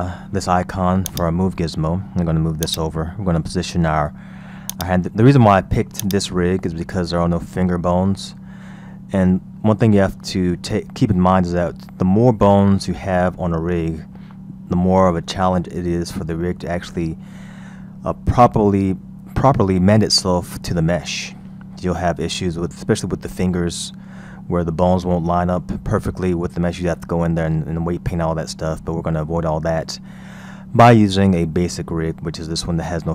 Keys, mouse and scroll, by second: 1.1 click, 2.7-8.0 drag, 8.0-8.8 scroll down 4, 9.7-12.6 scroll up 7, 12.6-15.1 scroll down 2, 20.1-20.4 scroll up 2, 21.8-24.7 scroll down 3, 24.7-25.0 scroll up 3, 28.5-30.4 scroll down 3, 30.4-31.1 scroll up 4, 32.3-32.8 scroll down 2.